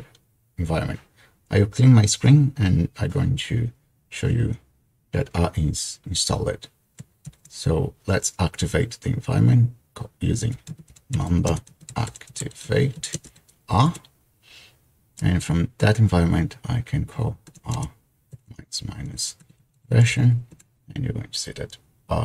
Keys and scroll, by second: 7.4 ctrl+l, 10.3-13.5 typing, 17.5-20.6 typing.